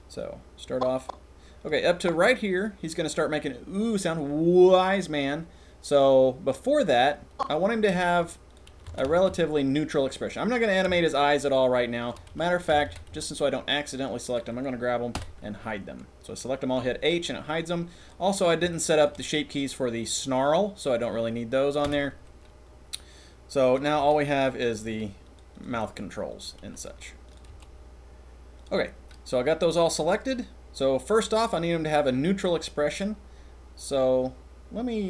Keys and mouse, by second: 0.1-1.6 drag, 2.0 click, 7.3 click, 7.9 c, 8.5-8.8 drag, 8.8 a, 9.0 a, 9.2 c, 10.5 click, 10.9 shift+middle click, 11.5-11.9 shift+middle drag, 11.9 shift+click, 12.7 a, 12.8 a, 13.1 c, 15.1 h, 18.0 click, 18.6 shift+middle click, 18.9 shift+click, 21.8 h, 23.6 click, 24.1 g, 24.7 click, 24.9 g, 25.5 click, 25.7 g, 26.7 c, 27.5 g, 28.5 click.